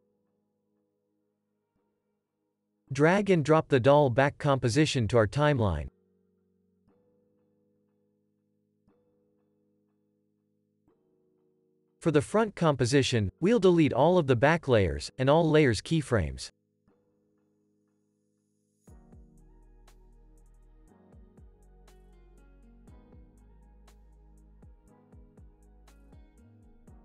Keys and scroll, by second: 0.8 super+s, 6.2 super+s, 17.1 Delete, 18.3 Delete, 23.6 Delete, 25.3 u.